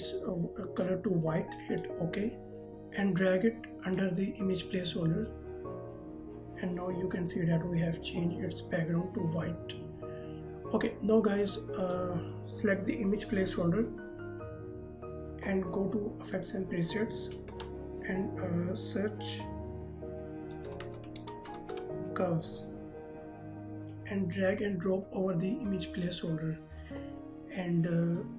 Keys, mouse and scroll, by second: 1.9 click, 2.6 z, 4.1 click, 12.0 click, 16.5 click, 17.7 ctrl+a, 20.7-21.9 typing, 24.1 click.